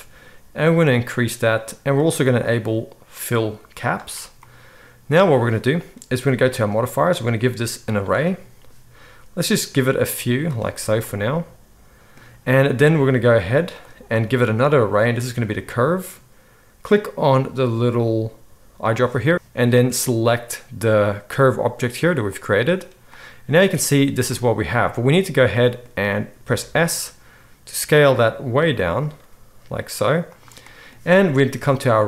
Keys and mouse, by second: 3.9-6.5 right drag, 6.5 middle click, 6.6-7.1 right drag, 7.1-18.9 middle drag, 18.9-31.7 right drag, 19.3 ctrl+z, 26.6 s, 29.2 s, 31.7-32.0 middle drag.